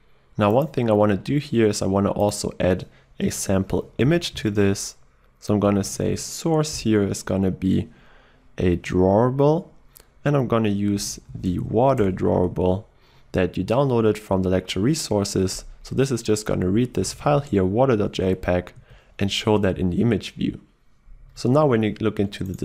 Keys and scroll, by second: 6.8 Return, 12.0 Return, 16.7 alt+1.